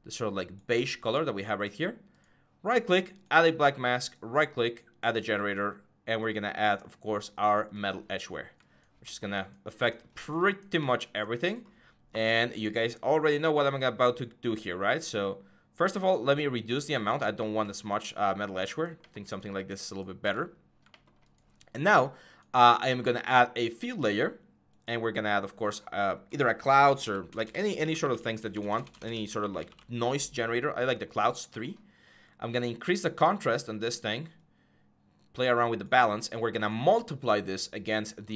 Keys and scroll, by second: 26.5-30.0 typing.